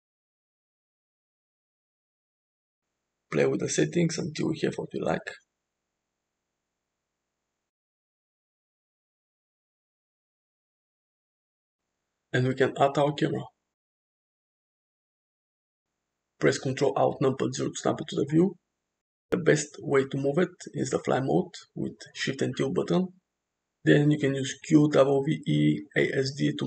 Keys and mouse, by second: 2.2 click, 3.1-5.9 shift+drag, 6.6 g, 9.2-9.7 middle drag, 10.4-11.9 middle drag, 12.2 shift+a, 16.5 shift+middle click, 16.5 shift+click, 17.7 ctrl+alt+KP_0, 18.7 g, 19.7 shift+`.